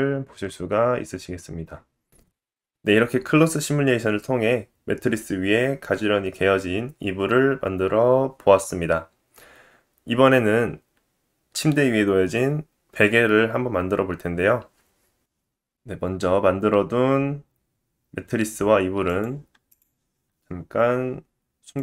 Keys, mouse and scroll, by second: 1.9-19.0 middle drag, 19.0 click, 19.2 middle click, 19.7 shift+click, 19.7-21.7 shift+middle drag, 21.7 click.